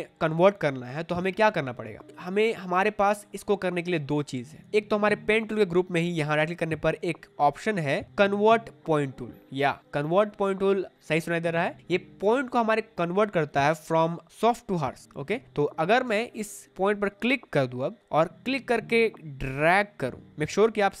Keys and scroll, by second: 3.7 space, 15.7 space.